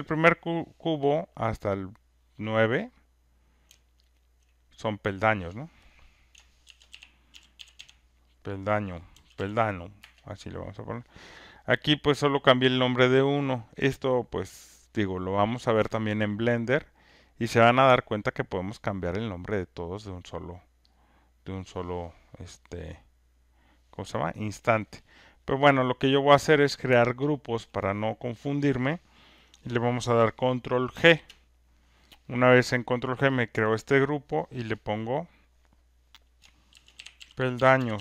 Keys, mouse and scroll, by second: 4.1 shift+click, 4.2 shift+click, 6.4-9.7 typing, 10.0 Return, 12.4 click, 13.7 click, 18.8 shift+click, 20.9 click, 26.0 click, 26.6 click, 27.5 shift+click, 30.9 ctrl+g, 33.2 click, 33.4 click, 36.5-38.0 typing, 37.8 click.